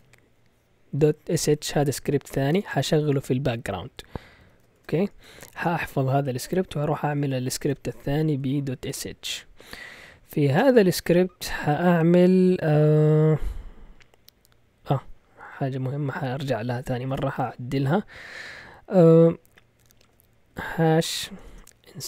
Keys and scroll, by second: 0.8-3.1 typing, 4.4 Escape, 4.5-5.3 typing, 5.6 Return, 6.6-9.3 typing, 10.6 Return, 17.3 typing, 20.5-22.0 typing.